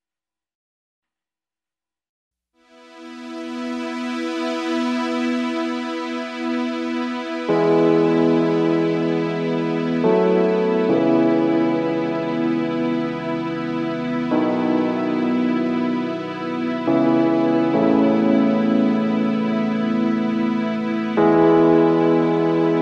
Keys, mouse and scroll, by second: 0.1 alt+shift+click, 3.3 ctrl+shift+a, 4.7 ctrl+shift+a, 7.8 shift+click, 9.6 ctrl+shift+a, 9.9 space, 11.3 alt+scroll up 1, 12.1 shift+click, 13.4 alt+shift+click, 16.0 alt+scroll down 1, 16.2 space, 16.7 alt+scroll up 1, 17.0 space, 19.5 alt+scroll up 1, 21.7 alt+scroll up 1, 22.6 alt+click.